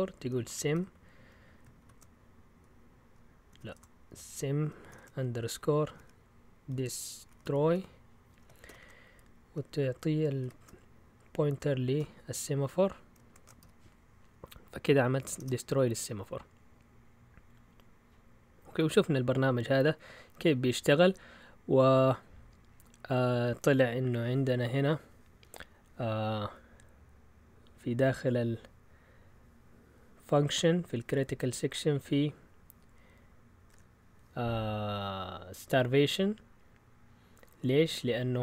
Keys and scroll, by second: 0.0-1.8 typing, 3.5 Delete, 3.7 BackSpace, 4.9-8.6 typing, 10.4 typing, 11.9-15.8 typing, 18.6 Up, 18.7-19.0 typing, 19.7 Up, 20.2 typing.